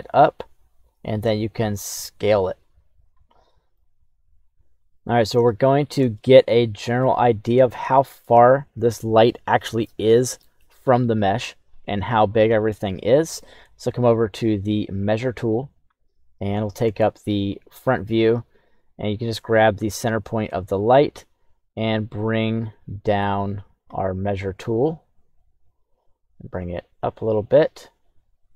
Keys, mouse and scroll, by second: 1.5 s, 3.4 middle click, 3.7-4.5 scroll up 1, 4.5 click, 5.4-6.0 shift+middle drag, 6.1-7.0 middle drag, 7.8 shift+middle click, 12.2 middle click, 14.8 click, 16.9 KP_1, 20.0-23.8 drag, 25.6-28.5 drag.